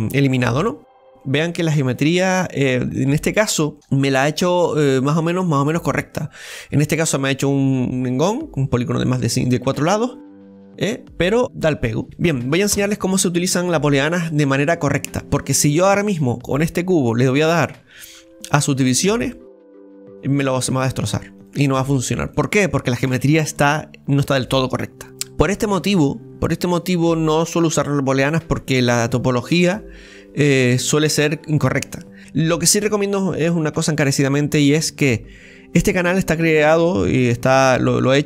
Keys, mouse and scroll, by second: 0.0-0.6 scroll down 2, 0.6 middle click, 1.1 scroll up 3, 1.2-5.7 middle drag, 11.4 scroll down 3, 11.4-12.4 middle drag, 16.0-18.4 middle drag, 18.4-21.9 drag, 21.9-22.4 scroll up 5, 22.3-25.1 middle drag, 25.1 scroll down 4, 25.1-28.1 middle drag.